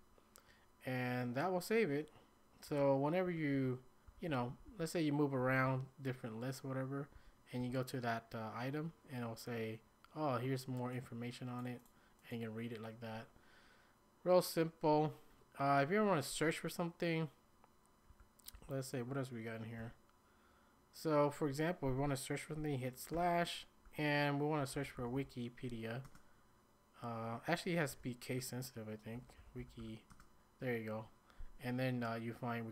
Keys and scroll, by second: 2.7-5.6 typing, 7.1-7.6 typing, 18.1-18.5 typing, 19.8 typing, 23.1 /, 24.4-25.6 typing, 26.0 Return, 27.7-30.3 typing.